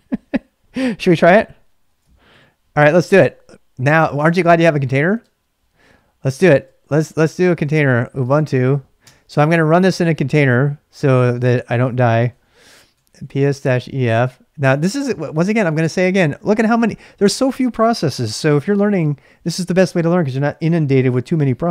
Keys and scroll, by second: 1.8 ctrl+a, 2.3-8.9 typing, 9.0 Return, 12.1-14.2 typing.